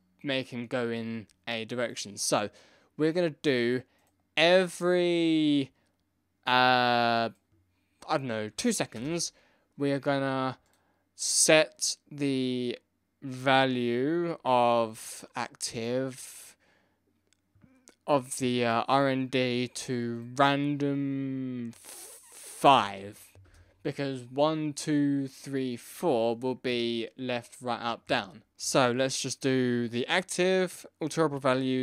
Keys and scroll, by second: 8.9 Return, 23.4 Return.